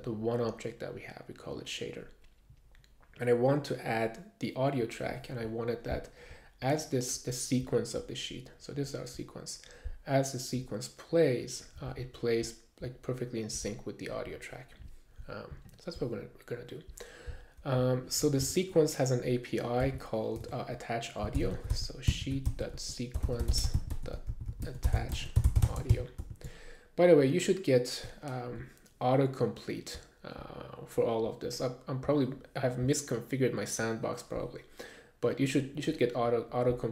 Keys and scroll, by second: 18.4 Return, 19.8 Return, 19.8 super+s, 20.4-26.7 typing.